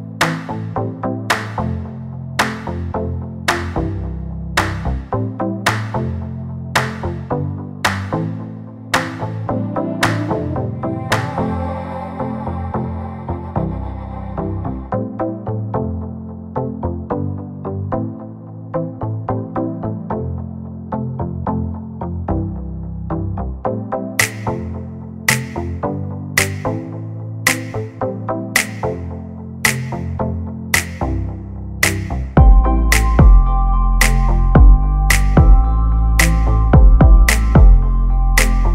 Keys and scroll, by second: 18.1 2, 18.6 Return, 22.7 ctrl+z, 34.9 Right.